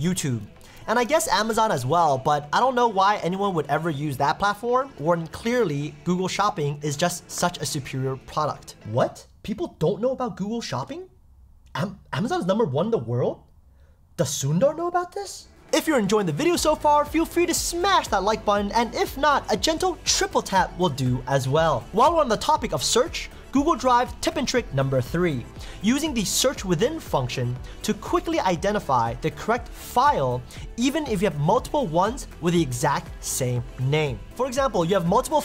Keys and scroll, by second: 0.8 super+t, 1.5 Tab.